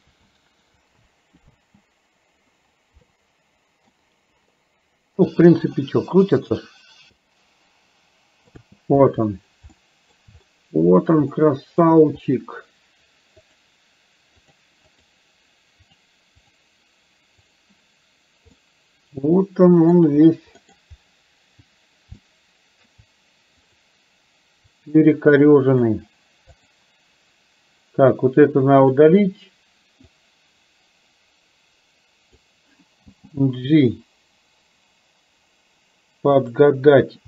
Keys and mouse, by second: 0.1 ctrl+z, 1.5 space, 3.1 middle click, 5.9-8.6 middle drag, 8.6 space, 9.9 shift+middle click, 11.5 shift+middle click, 13.5 click, 15.0 click, 16.0 click, 16.5 click, 17.5 click, 18.6-20.0 middle drag, 20.8 middle click, 22.2 shift+middle click, 23.8 click, 24.7-26.0 drag, 26.6 click, 29.0 click, 30.3-32.5 drag, 33.1 g.